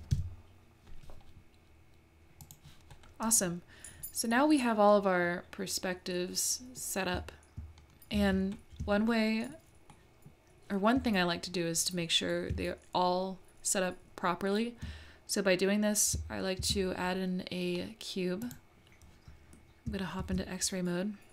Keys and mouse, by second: 2.4 click, 4.4-6.8 middle drag, 9.1 shift+middle click, 10.0 shift+middle click, 16.6 shift+a, 20.2 alt+z.